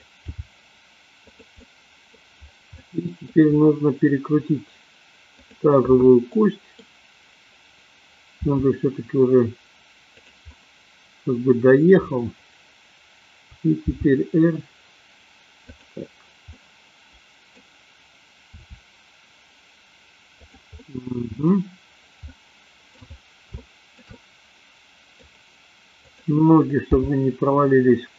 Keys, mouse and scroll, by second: 0.3 g, 1.4 click, 1.6 scroll up 1, 1.8 middle click, 2.8 middle click, 5.4 click, 6.3 middle click, 8.4 r, 10.3 click, 10.5-12.0 middle drag, 13.9 g, 15.6 click, 16.5-17.5 middle drag, 18.5 r, 20.8-21.5 middle drag, 22.3-22.9 middle drag, 23.5 shift+middle click, 24.1-25.3 middle drag, 26.1 click, 26.9 g.